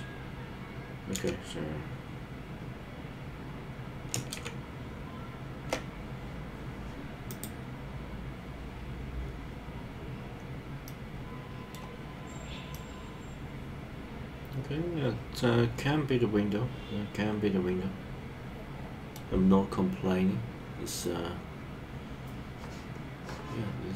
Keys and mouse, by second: 1.2 super+z, 4.4 shift+super+z, 10.8 middle click, 12.7-19.1 middle drag.